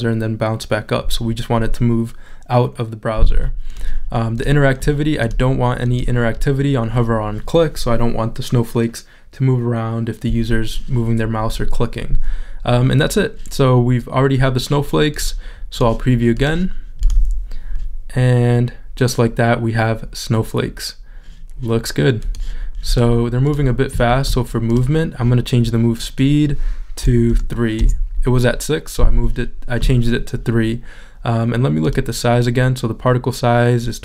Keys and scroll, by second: 27.3 3, 28.8 Return.